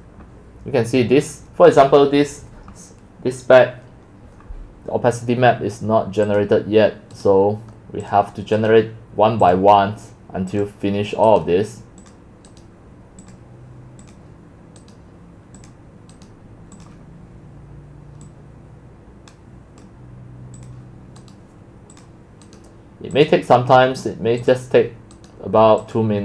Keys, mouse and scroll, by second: 0.1-5.1 drag, 6.4 click, 7.3-8.1 right drag, 10.0-11.4 drag, 11.4-12.0 right drag, 12.4 right click, 13.3 click, 14.2 click, 20.7 click, 21.3 right click, 22.2-22.6 drag, 22.6-23.3 right drag, 23.3-25.3 drag, 25.3-26.0 right drag, 26.0 click.